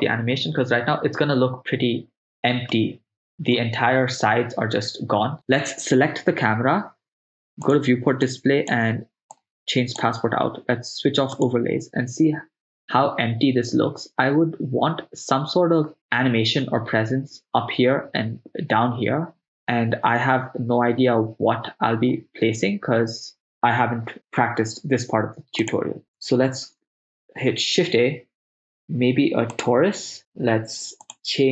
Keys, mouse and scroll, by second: 0.0 click, 2.8-3.6 ctrl+middle drag, 5.4 right click, 7.7 click, 8.3 click, 9.4 click, 11.4 click, 25.7 click, 26.6 shift+a, 31.3 click.